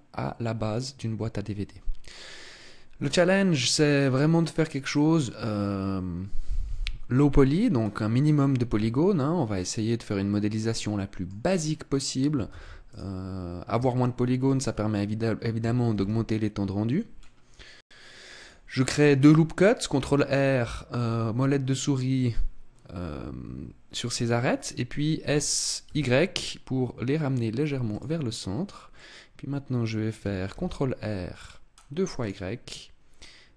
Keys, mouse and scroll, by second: 7.9-8.8 scroll up 2, 8.8 Tab, 9.5 middle click, 11.7 scroll up 2, 12.5 ctrl+s, 14.0 shift+middle click, 16.1 ctrl+r, 18.4 click, 25.1 s, 28.3 click, 28.3-28.9 scroll up 2, 28.9 middle click, 30.5 ctrl+r, 32.2 click.